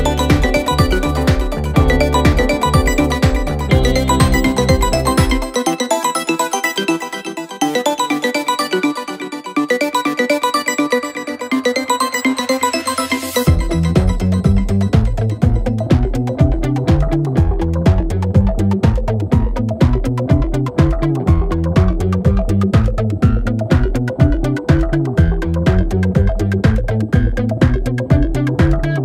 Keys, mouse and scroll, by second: 0.6 click, 1.0 scroll down 2, 1.7-2.1 drag, 2.3 scroll down 4, 2.5-2.8 middle drag, 2.8 scroll down 4, 3.1 middle click, 3.8 click, 4.2 click, 5.0-6.1 middle drag, 6.1 click, 6.8 a, 7.2 g, 8.8 middle click, 9.8 g, 10.8 middle click, 11.3 r, 12.7-13.7 right drag, 13.7-14.1 drag, 14.1-15.6 right drag, 15.6-16.8 drag, 17.2 middle click, 17.8 r, 18.8-19.6 middle drag, 19.6 space, 20.0-20.9 middle drag, 20.9 click, 21.5 g, 23.0 click, 23.2 space, 23.4-23.8 middle drag, 23.8 click, 24.0-25.5 middle drag, 26.5 click, 27.7 click.